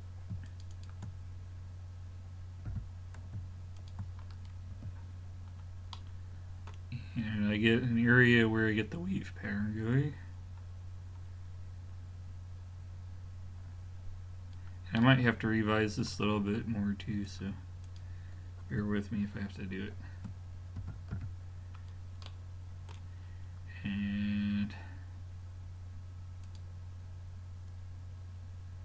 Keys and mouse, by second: 0.5-2.6 drag, 2.7 g, 4.8 a, 17.3-19.7 drag, 20.8 x, 21.9-22.3 middle drag, 26.5-28.3 drag.